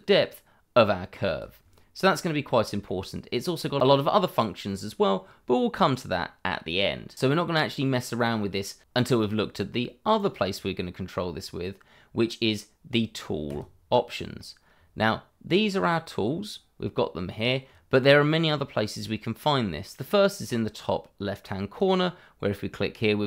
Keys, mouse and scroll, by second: 2.1 middle click, 6.6-8.8 scroll up 1, 13.4 click, 21.7 click.